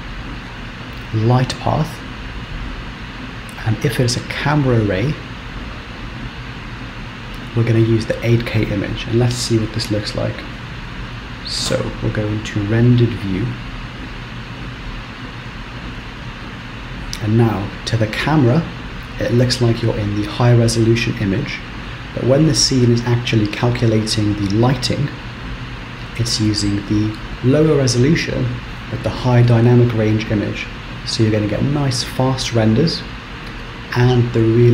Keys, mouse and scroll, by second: 10.9 ctrl+space, 12.0 z.